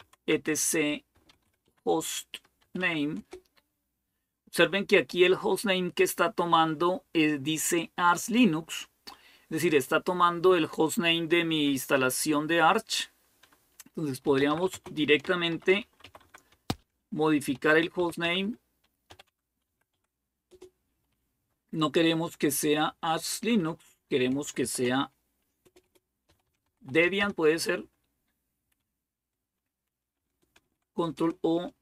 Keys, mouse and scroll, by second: 0.0-3.0 typing, 13.8-22.2 typing, 22.4 Delete, 22.6 Delete, 23.7 Delete, 24.2-27.5 typing, 30.4 ctrl+o, 31.0 Return.